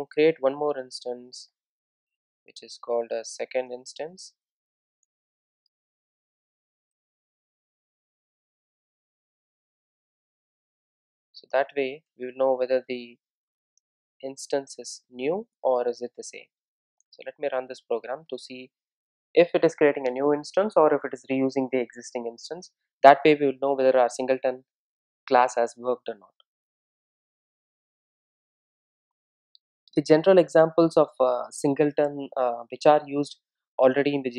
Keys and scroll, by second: 8.5 Return, 12.8 Return, 14.4 Tab, 17.8 Return.